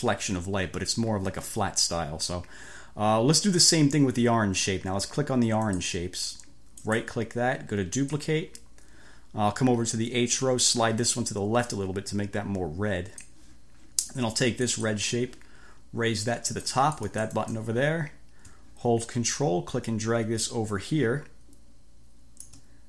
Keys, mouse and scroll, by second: 5.7 click, 6.9 right click, 8.1 click, 10.7 click, 14.7 click, 16.7 click, 19.4-22.7 ctrl+drag.